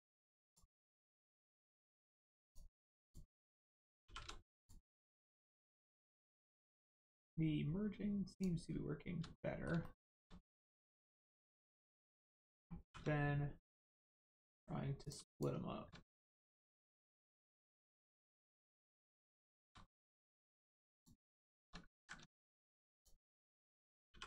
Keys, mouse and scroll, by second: 0.9 shift+middle click, 1.4 scroll up 1, 2.4 shift+click, 3.0 shift+click, 4.0 shift+r, 4.5 click, 4.9 scroll down 1, 5.5 shift+middle click, 8.3 click, 9.4 middle click, 9.8 shift+middle click, 10.6 middle click, 10.7 middle click, 11.5 click, 12.0 shift+click, 12.8 shift+r, 13.9 middle click, 15.0 click, 15.3 shift+click, 16.4-17.0 scroll up 1, 17.6 shift+click, 18.6 middle click, 19.4 shift+middle click, 19.7 scroll up 1, 20.9 shift+click, 21.8 ctrl+click, 21.9 ctrl+z, 22.9 shift+click, 24.1 shift+r.